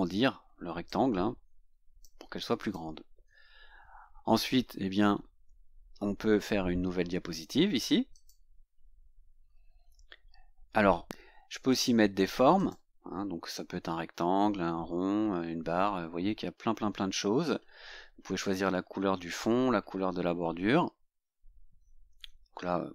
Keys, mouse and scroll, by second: 0.9-2.3 drag, 2.7 click, 5.1 scroll down 2, 8.2 click, 9.5 scroll up 2, 11.8 click, 12.7 click.